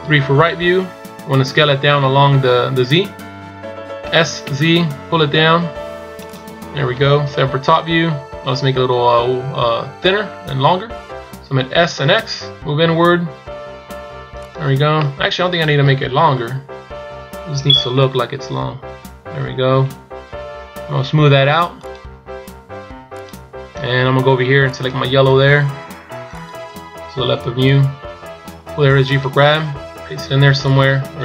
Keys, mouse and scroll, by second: 7.3 KP_7, 15.0 middle click, 16.2 KP_1, 17.7 KP_7, 19.4 KP_1, 21.8 click, 23.2 click.